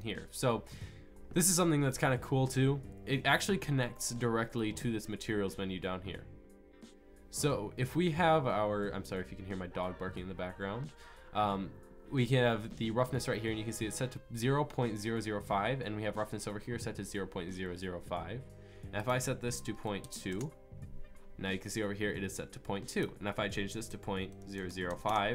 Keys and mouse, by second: 25.1 KP_0.